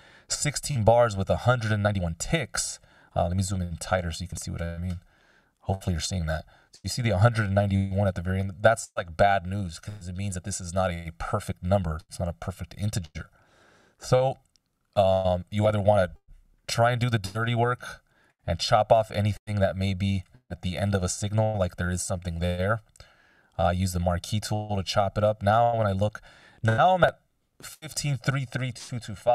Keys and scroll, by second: 16.2 F16, 21.0 BackSpace.